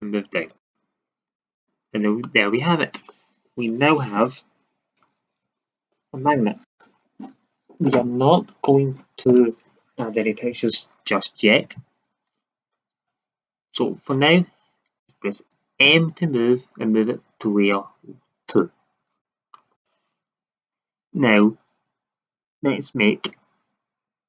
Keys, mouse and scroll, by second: 0.6-1.6 drag, 1.6 Tab, 15.8 m, 19.4-23.0 middle drag.